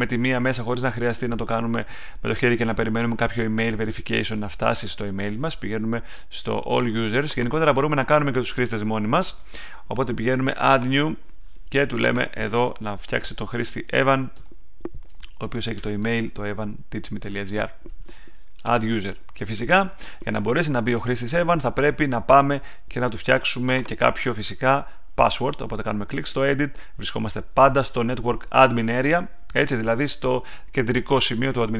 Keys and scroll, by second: 13.2-14.3 typing, 15.5-16.6 typing, 16.8 Down, 17.1 Return.